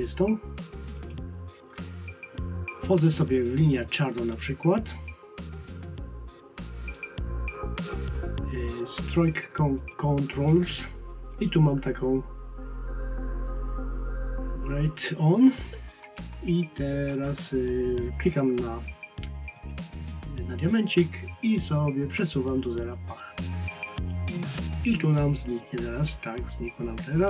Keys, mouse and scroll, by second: 3.5 click, 9.8 click, 19.6 click.